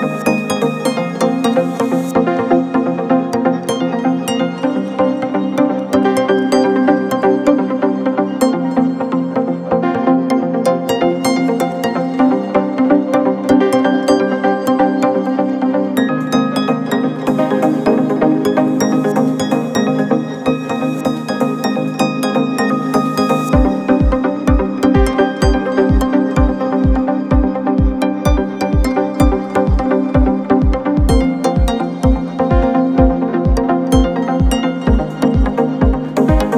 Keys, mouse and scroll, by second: 0.8-3.0 drag, 5.9 alt+scroll up 1, 6.2 space, 6.3-6.8 click, 6.6 space, 7.4 click, 15.0-15.5 typing, 16.5-17.6 typing, 19.0-22.2 typing, 23.1 click, 24.8-25.8 drag, 26.2 ctrl+t, 27.3 click, 28.0 t, 28.3 click, 29.0 t, 29.4-31.6 drag, 32.5 t, 33.1 click, 33.8 BackSpace, 35.6 click.